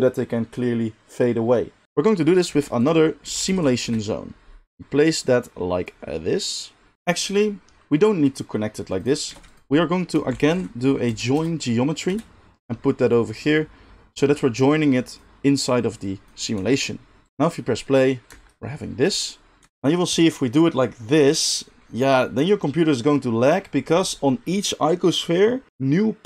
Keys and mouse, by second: 1.8 shift+middle click, 1.8 shift+a, 2.5 shift+a, 4.7 g, 5.1-9.0 drag, 9.3 shift+a, 13.3-26.2 drag, 16.6 g, 17.3 space, 18.3 space.